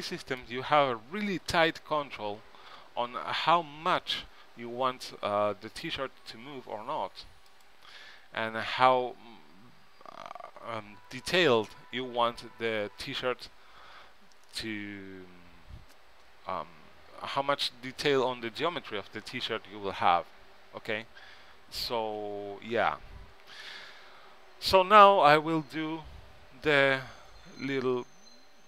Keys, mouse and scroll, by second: 1.4 g, 5.6 s, 22.3 a, 23.6-25.9 middle drag.